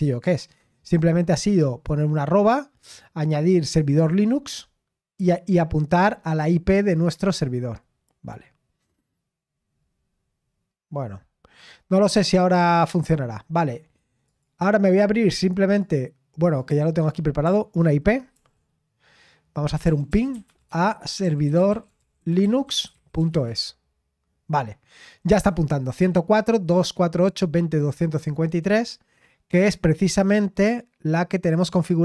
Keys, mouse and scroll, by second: 6.0-6.9 scroll up 1, 6.9-10.0 drag, 10.0-10.4 scroll up 1, 10.4-11.5 scroll down 1, 11.5-12.1 scroll up 1, 14.2-17.4 drag, 18.3 ctrl+l, 19.8-23.3 typing, 23.4 Return, 28.7 click, 31.4 click.